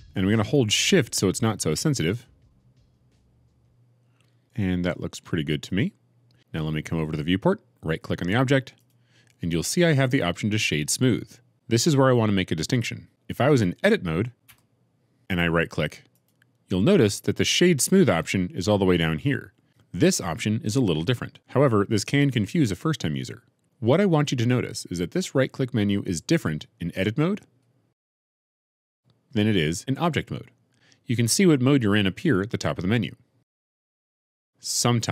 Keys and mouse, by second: 8.7 right click, 14.4 Tab, 16.2 right click, 27.3 click, 28.3 Tab, 28.9 click, 33.6 Tab, 33.9 click.